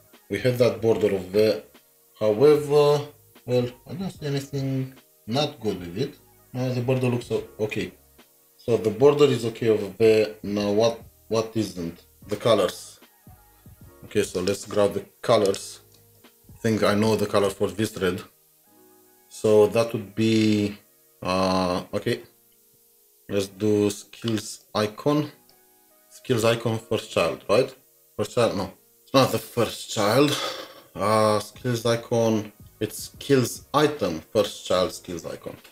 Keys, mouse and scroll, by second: 0.7 typing, 15.9 typing, 16.2 double click, 16.2 double click, 17.4 alt+Tab, 26.3 ctrl+c, 26.3 typing.